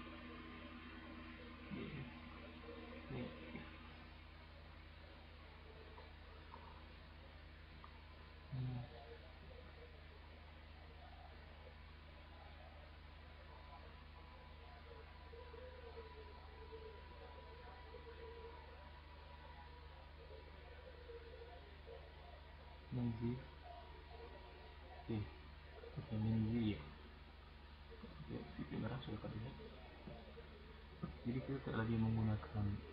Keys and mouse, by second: 0.2 middle click, 0.7 click, 1.9-2.5 middle drag, 3.5 middle click, 6.8-7.3 middle drag, 8.9-9.9 middle drag, 10.1-11.0 drag, 14.4-16.0 drag, 16.6 click, 18.1-19.5 drag, 19.8 click, 21.1 click, 22.6 click, 23.8-25.9 drag, 25.9 middle drag, 27.8 click, 29.8-31.3 right drag, 31.3-31.7 middle drag, 31.7 drag.